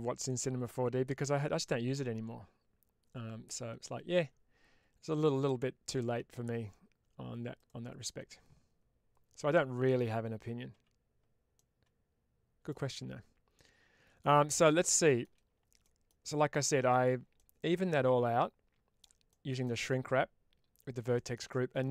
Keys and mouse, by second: 11.4-12.6 middle drag, 13.5 middle click, 14.8 shift+middle click, 15.7 middle click, 16.5 middle click, 17.2-18.9 middle drag, 19.2 shift+middle click, 19.5-20.8 middle drag, 21.0 shift+middle click, 21.4 middle click.